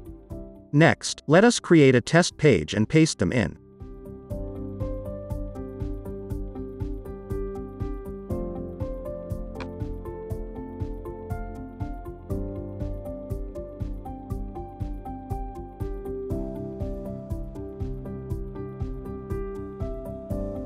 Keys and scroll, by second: 10.2-12.7 typing, 18.5 super+v.